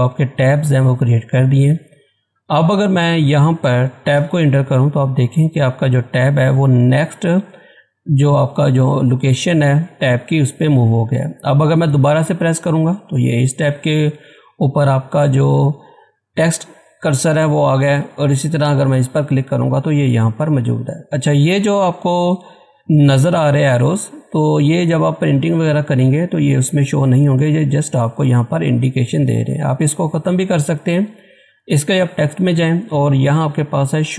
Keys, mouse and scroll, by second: 2.5-4.1 scroll up 1, 4.1 Tab, 12.2 Tab, 18.0 Tab, 32.0 click.